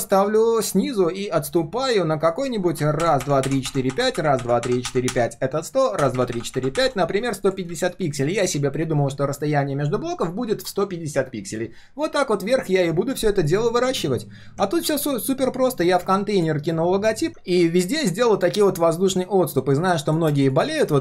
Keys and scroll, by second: 8.2 ctrl+shift+4, 15.4 ctrl+shift+3.